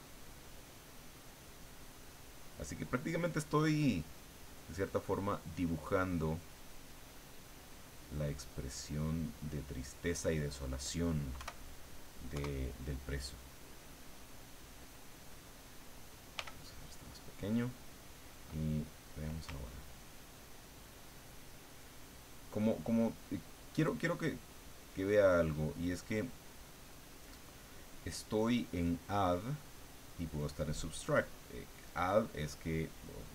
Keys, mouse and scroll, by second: 1.2 click, 2.3 click, 3.2 click, 4.1 click, 4.7 click, 5.3 click, 6.5-7.8 drag, 8.4-9.5 drag, 10.4 click, 11.3 KP_2, 12.3 KP_1, 13.5 click, 14.7 click, 16.4 f, 17.5 click, 20.5-22.7 ctrl+drag.